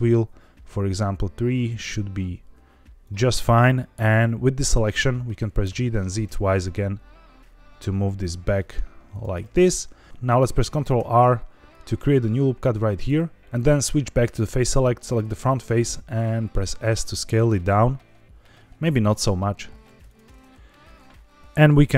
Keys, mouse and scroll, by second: 3.0 click, 5.6 g, 5.8 z, 6.2 z, 9.0 click, 9.3 middle click, 10.9 ctrl+r, 12.9 click, 14.3 3, 15.0 click, 15.8 s, 17.4 click, 18.2 s, 19.7 Escape, 19.8 2, 20.0 alt+click.